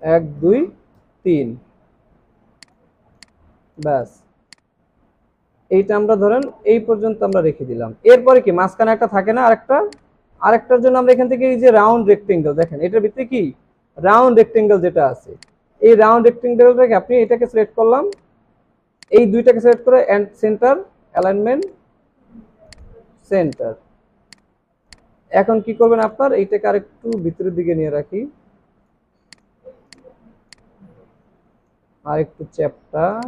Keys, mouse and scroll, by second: 0.0 Left, 0.4 Left, 3.5 alt+scroll down 1, 3.7 space, 10.1 right click, 26.5 alt+scroll up 1, 30.5 alt+click.